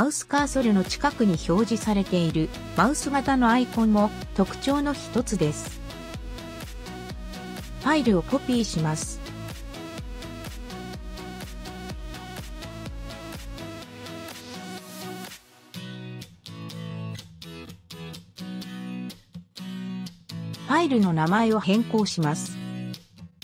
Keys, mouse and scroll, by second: 3.6 click, 8.6 drag, 10.5 ctrl+c, 14.1 ctrl+v, 16.5 ctrl+v, 17.5 ctrl+v, 20.1 click, 21.7 F2, 23.2-23.4 typing.